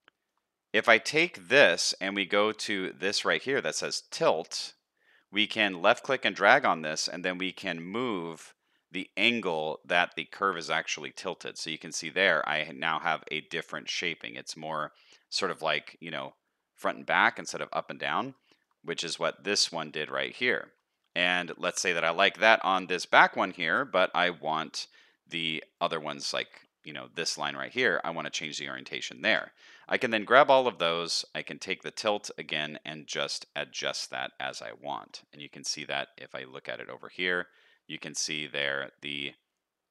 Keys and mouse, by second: 0.2 shift+click, 1.1 shift+click, 11.4-12.7 middle drag, 12.8 shift+middle click, 13.1 middle click, 14.6 middle click, 15.7 shift+middle click, 17.0 middle click, 18.0 middle click, 18.5 shift+middle click, 20.9 shift+middle click, 22.6 middle click, 26.2 shift+middle click, 30.4 shift+middle click, 32.3-34.1 drag, 34.1 middle click, 34.8 middle click, 35.5 shift+middle click.